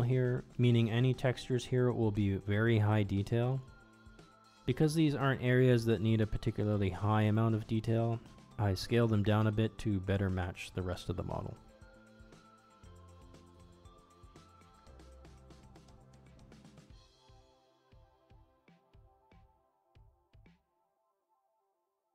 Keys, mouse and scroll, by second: 0.1 s, 1.5 g, 2.1 middle click, 2.3 middle click, 3.1 shift+middle click, 3.5 middle click, 3.9 Tab, 4.6 ctrl+Tab, 5.1 a, 5.3 u, 6.3 s, 7.7 g, 8.2 shift+middle click, 8.5 Tab, 9.1 click, 9.3 ctrl+Tab, 10.5 u, 10.9 s, 12.2 g, 13.2 ctrl+Tab, 13.3 click, 14.2 u, 15.1 s, 16.3 g, 17.2 middle click, 17.6 middle click, 17.8 Tab, 18.3 click, 18.4 middle click, 19.7 alt+click, 19.9 middle click, 20.6 middle click, 21.0 shift+click, 21.3 shift+click, 22.0 middle click.